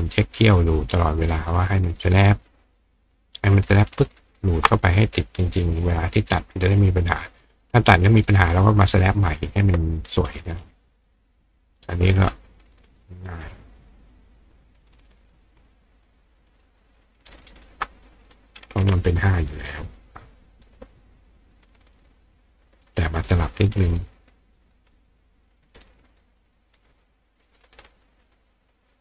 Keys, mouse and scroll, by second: 0.6 ctrl+click, 2.7-4.1 ctrl+drag, 4.7 click, 5.9 click, 6.2 right click, 8.6 click, 10.9 click, 11.5 click, 12.6-13.1 drag, 13.7-14.1 drag, 14.5-15.1 drag, 16.5 ctrl+click, 17.3-20.0 ctrl+right drag, 18.2 click, 18.7 click, 20.3 click, 21.6 click, 22.7 click, 23.3 click, 24.6 click, 25.6 click, 26.8 click, 27.6 click, 28.6 click.